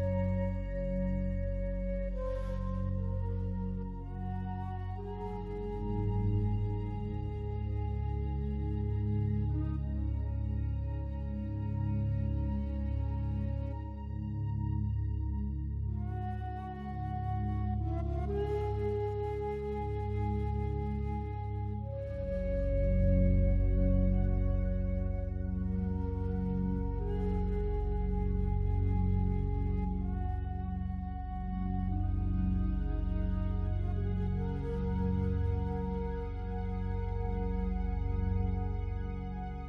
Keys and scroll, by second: 27.8 ctrl+0.